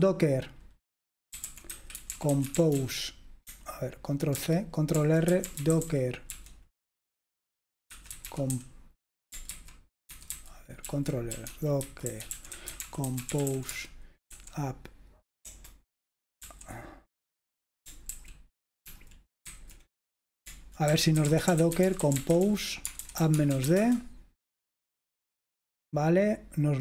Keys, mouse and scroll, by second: 0.0-3.3 typing, 4.5 ctrl+c, 5.0 ctrl+r, 5.1-9.1 typing, 9.5 ctrl+c, 10.1 ctrl+c, 10.4 ctrl+c, 11.0 ctrl+r, 11.2-14.4 typing, 15.6-16.5 typing, 18.2 ctrl+r, 19.0 ctrl+r, 19.6 ctrl+c, 20.8-24.2 typing.